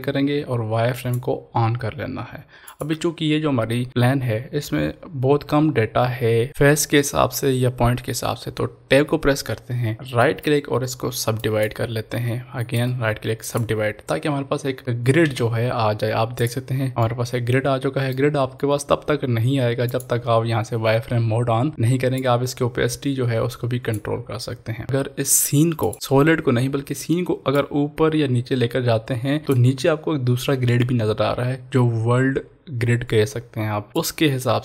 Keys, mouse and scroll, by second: 1.0 click, 9.1 Tab, 10.2 right click, 11.4 click, 12.7 right click, 13.4 click, 15.3 Tab, 16.3 click, 17.1-19.9 middle drag, 19.9 click, 22.5-24.1 drag, 24.8 middle drag, 25.9-31.9 drag, 27.8-29.7 drag, 33.9 click, 34.0-34.6 drag.